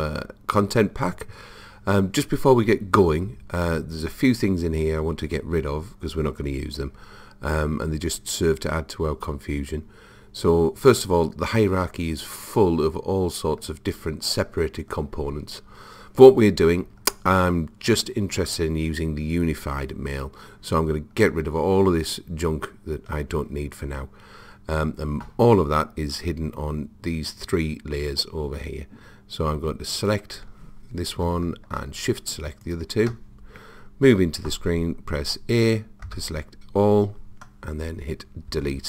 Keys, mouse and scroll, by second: 30.0 click, 32.0 click, 36.1 a, 38.6 Delete.